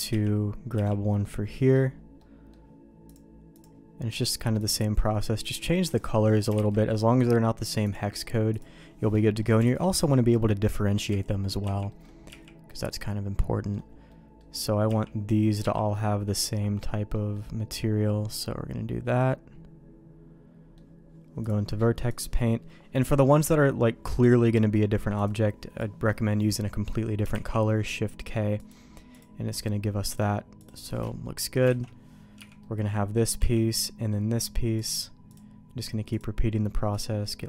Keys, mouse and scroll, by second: 0.1 l, 0.7 l, 1.2 middle click, 2.2 middle click, 3.2 click, 6.5 shift+k, 7.9 click, 9.3 middle click, 9.6 alt+a, 11.1 l, 11.6 l, 11.9 middle click, 12.3 l, 12.7-13.7 middle drag, 13.7 click, 14.1 middle click, 14.8 click, 15.6 click, 15.9 middle click, 17.1 middle click, 18.4-20.7 middle drag, 21.5 click, 27.3 shift+k, 28.6 click, 29.1-30.6 drag, 30.9 middle click, 31.7 alt+a, 32.4 l, 32.6 middle click, 33.4 l, 33.7 middle click, 34.7 click.